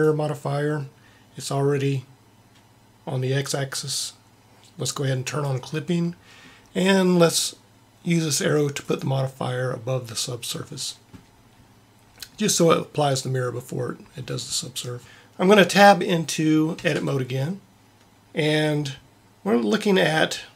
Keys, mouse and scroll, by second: 5.3 click, 16.7 Tab.